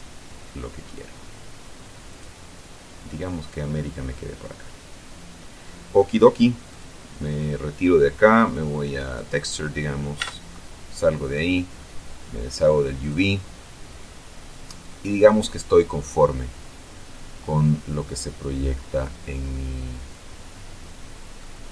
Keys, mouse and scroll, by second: 2.2 click, 6.8 click, 9.1 click, 10.1 Tab, 12.5 click, 13.6-21.6 middle drag, 21.6 scroll up 1.